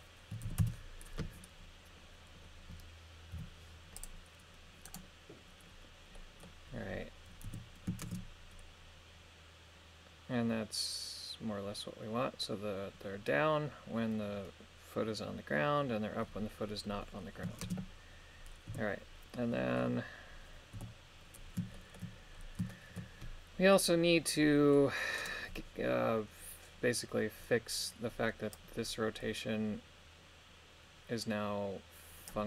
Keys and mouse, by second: 0.3 KP_2, 0.5 KP_5, 0.6 Return, 3.3 i, 4.9 right click, 6.1 middle click, 7.4 KP_3, 8.0 shift+space, 17.7 shift+space, 18.7 KP_3, 20.7 KP_1, 21.7 shift+middle click, 22.7 shift+middle click, 25.2 right click, 28.5 click.